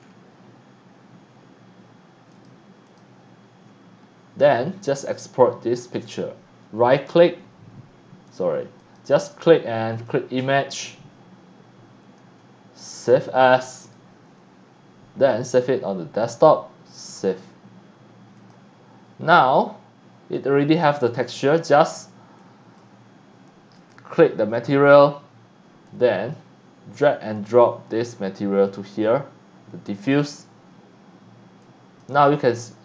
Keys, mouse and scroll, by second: 0.0 scroll down 3, 0.4 scroll up 1, 2.3 click, 2.9 click, 3.9 scroll up 2, 4.4 scroll down 1, 5.9 right click, 8.3 click, 8.8 click, 9.9 click, 12.2 click, 13.8 click, 15.5 click, 17.2 click, 18.4 click, 19.6-20.4 drag, 21.1 click, 22.4 click, 23.8 click, 25.8-26.3 drag, 27.3-30.1 drag, 31.6 click, 32.3-32.7 scroll up 2.